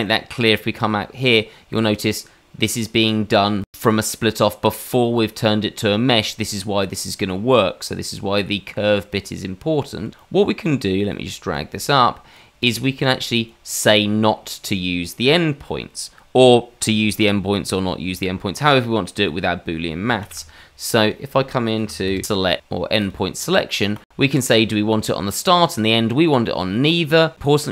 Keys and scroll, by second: 20.2 shift+a.